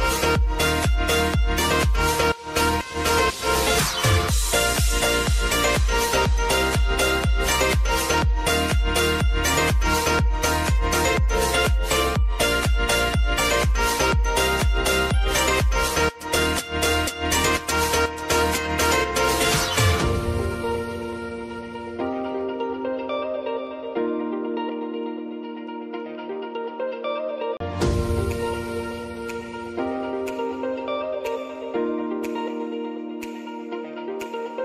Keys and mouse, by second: 0.6 click, 1.7 space, 7.2 ctrl+d, 7.8 [, 8.6 space, 10.0 v, 10.5 click, 11.3 ctrl+z, 11.9-14.7 drag, 14.7 space, 15.9 click, 16.3 space, 20.9 click, 21.4 ctrl+d, 22.4-24.1 drag, 24.1 [, 24.7 space, 27.7 click, 28.2 space, 32.7 space, 33.6 click, 34.1 space.